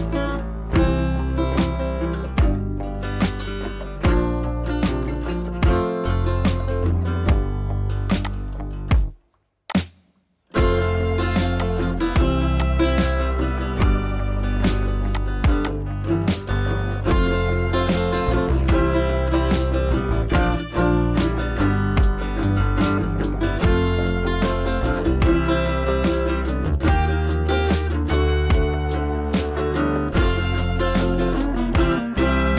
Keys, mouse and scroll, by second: 7.2 scroll up 1, 8.0 space, 8.2 click, 8.5 space, 9.0 scroll up 1, 9.5 space, 11.9 click, 13.0 space, 15.0 click, 16.9 ctrl+z, 18.8-20.9 drag.